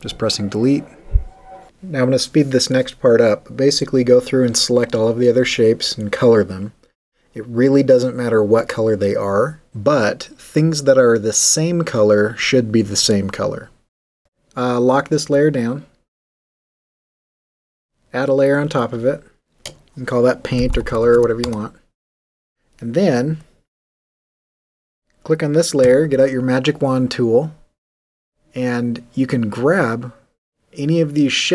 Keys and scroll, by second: 0.7 BackSpace, 2.5-4.3 typing, 4.7 super+u, 5.9-7.0 typing, 7.4 alt+w, 7.5 alt+g, 7.7 super+d, 8.5 l, 12.6 super+d, 13.5 w, 20.3-21.6 typing, 25.8 w.